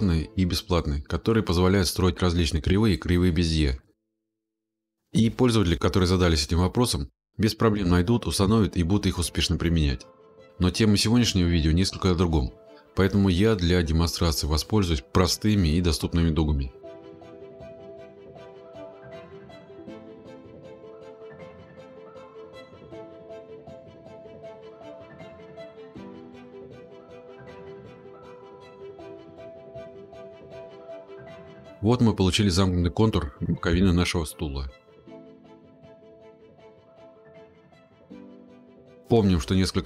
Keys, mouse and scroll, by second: 0.9 click, 9.0 click, 10.7 click, 12.3 click, 19.6-20.2 scroll, 24.2 click, 25.8 click, 26.3-28.0 scroll, 28.9 click, 29.7-30.6 scroll, 32.1 scroll, 35.5 click, 37.8 Escape, 39.2 click.